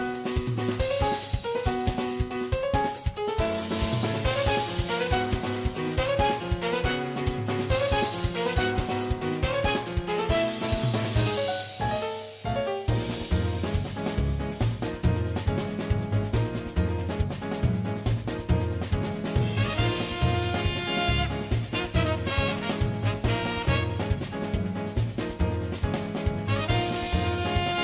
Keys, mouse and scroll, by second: 0.7 middle click, 0.9 click, 1.1 right click, 1.5-4.0 typing, 1.6 middle click, 2.2 middle click, 2.3 middle click, 2.5 right click, 2.5 middle click, 2.7 middle click, 3.1 middle click, 3.3 middle click, 3.8 right click, 4.0 middle click, 4.8 middle click, 5.1 middle click, 5.5 shift+click, 5.7 middle click, 6.1 click, 6.3 middle click, 6.3 f, 6.5 middle click, 6.6 middle click, 6.8 middle click, 7.4 middle click, 7.7 middle click, 7.8-9.1 typing, 8.4 middle click, 8.9 middle click, 9.1 middle click, 9.6 ctrl+click, 10.1 middle click, 10.4 middle click, 10.4 f, 10.8 right click, 11.0 middle click, 11.4 middle click, 11.8 shift+click, 11.9 middle click, 11.9-13.0 typing, 12.1 right click, 12.4 middle click, 12.5 middle click, 12.6 middle click, 12.8 middle click, 13.0 middle click, 13.1 middle click, 13.3 middle click, 13.9 middle click, 14.0 middle click, 14.1 middle click, 14.4 middle click, 14.6 middle click, 14.6-15.9 typing, 15.2 middle click, 15.8 shift+middle click, 16.1 middle click, 19.0 middle click, 19.1 middle click, 19.6 middle click, 20.0 middle click, 20.3 right click, 20.5 middle click, 20.5 f, 21.2 right click, 21.2 middle click, 21.4 middle click, 22.0 right click, 22.7 middle click, 23.5 middle click, 24.6 middle click, 24.9 middle click, 25.0-27.8 typing, 25.0 middle click, 25.2 click, 25.4 middle click, 25.6 middle click, 26.1 middle click, 26.2 click, 27.3 middle click, 27.5 click.